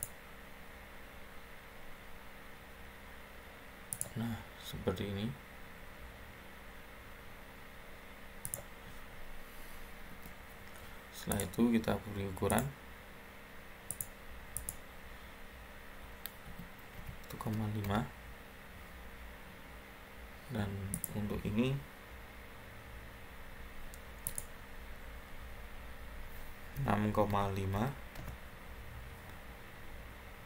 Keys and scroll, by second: 10.0 Escape, 16.1-17.8 typing, 26.4-27.6 typing, 28.1 Return.